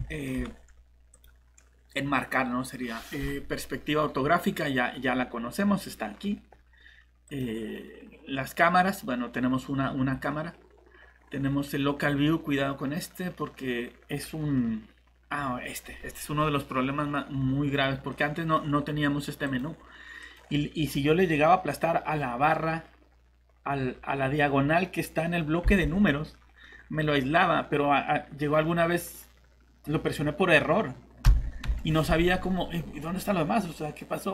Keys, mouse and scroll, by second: 0.1 middle click, 0.3 scroll down 1, 1.1 click, 18.1 middle click, 19.4 click, 25.6 shift+-, 31.2 -, 31.6 -, 32.3 middle click.